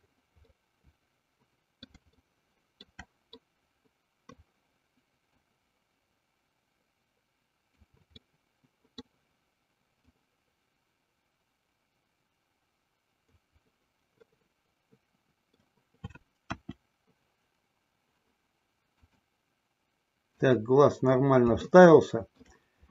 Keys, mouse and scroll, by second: 0.9-3.2 middle drag, 3.6-4.9 middle drag, 5.6-8.2 drag, 8.5-9.3 middle drag, 10.3-13.7 drag, 14.6-16.0 middle drag, 16.8 KP_1, 19.2 click, 20.6 click, 22.1 shift+middle click.